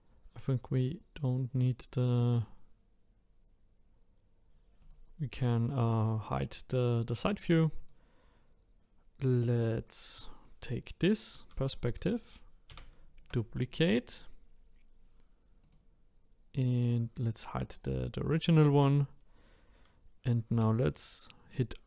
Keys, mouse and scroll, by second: 0.4-3.6 middle drag, 4.8 click, 7.0 click, 7.7 click, 9.6 click, 12.7 shift+d, 15.6 click, 20.5 r.